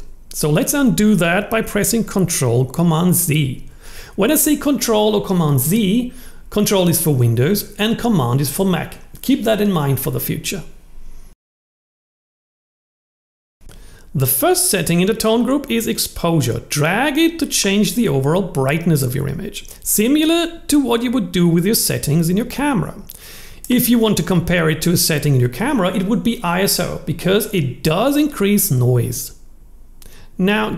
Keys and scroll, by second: 3.1 super+z.